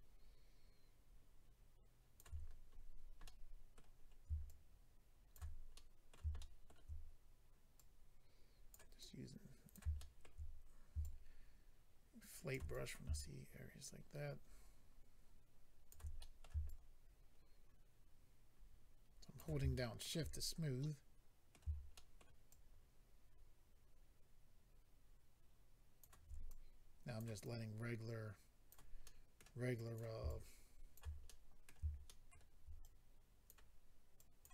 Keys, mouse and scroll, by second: 2.3-3.2 scroll down 7, 3.2 middle click, 4.0 middle click, 4.0-4.4 scroll up 1, 4.4 shift+click, 5.2 scroll up 1, 5.7 middle click, 6.4 shift+middle click, 6.7 middle click, 7.8 click, 9.0 click, 10.0 shift+middle click, 11.0 shift+click, 12.7 click, 12.9 click, 13.1 shift+click, 16.2 middle click, 16.7 shift+click, 19.7 shift+middle click, 20.3-20.8 scroll down 1, 20.8 middle click, 21.9 shift+middle click, 22.5 shift+click, 26.4 click, 27.4 click, 29.0 middle click, 29.7 click, 30.2 shift+click, 30.9 click, 31.2 middle click, 32.0 shift+middle click, 32.8 click, 34.1 click.